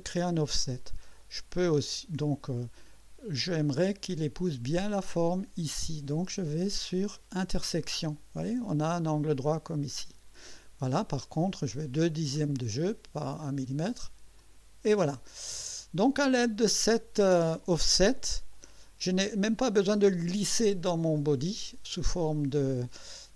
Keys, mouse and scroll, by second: 0.6 scroll up 2, 1.1 right click, 1.9-2.7 drag, 6.7 click, 7.5 click, 11.2-12.3 scroll down 3, 12.7-13.2 scroll down 3, 14.4 click, 15.6 click, 18.5 click.